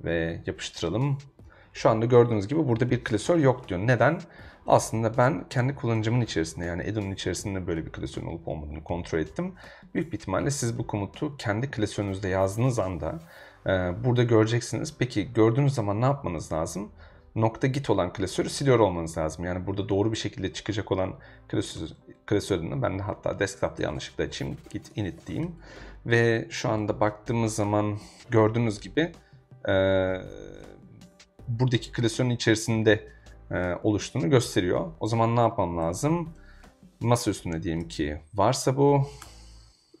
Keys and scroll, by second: 0.7 Return, 4.5-6.3 typing, 21.3-25.6 typing, 34.8-36.8 typing, 37.8 ., 39.2 Tab, 39.7-40.0 typing.